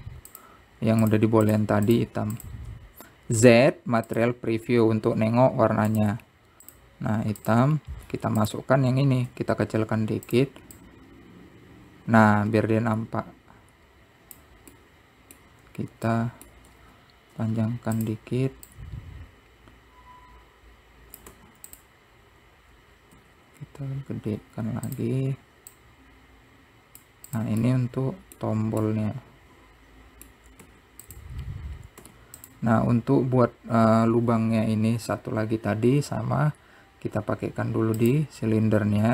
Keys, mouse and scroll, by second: 0.1-0.5 scroll up 1, 2.2 shift+click, 2.6 shift+click, 3.0 shift+click, 3.5 shift+click, 7.2 t, 9.3 Tab, 9.6 click, 10.5 s, 12.1-15.0 drag, 15.9-17.3 middle drag, 17.3 scroll up 1, 17.4 middle click, 17.9 s, 20.0 click, 24.3 s, 26.9 click, 28.5 click, 28.9-31.9 middle drag, 34.0-35.6 scroll down 1, 35.6-36.4 scroll down 8, 36.4-38.3 scroll up 2.